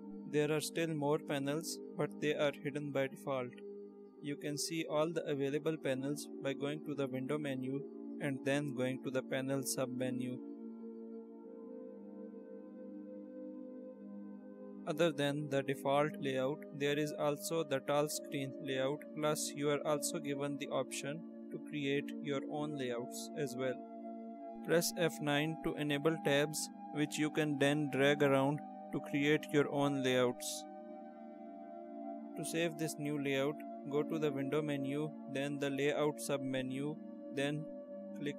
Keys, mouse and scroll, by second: 8.8 click, 11.5 click, 12.9 click, 13.2 click, 13.9 click, 16.3 click, 18.2 click, 20.6 click, 25.2 F9, 27.9 click, 29.6 click, 34.9 click, 38.2 click.